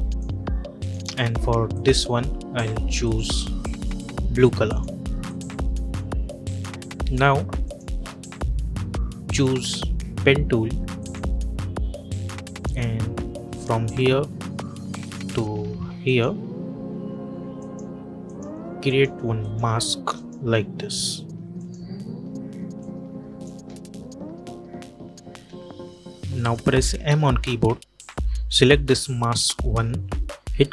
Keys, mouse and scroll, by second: 13.5 click, 15.9 click, 23.4 space, 26.2 click, 26.9 m, 28.3 click.